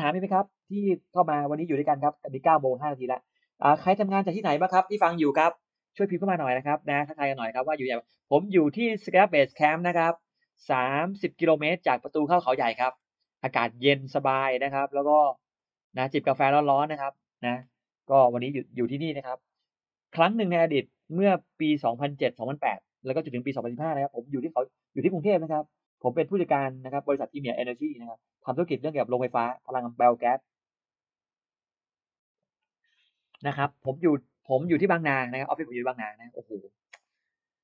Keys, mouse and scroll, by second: 5.9-7.9 scroll up 2, 8.1-8.7 scroll up 1, 8.8 scroll up 1, 12.7-13.4 scroll down 2, 13.9-14.2 scroll down 1, 15.4 click, 16.9 middle click.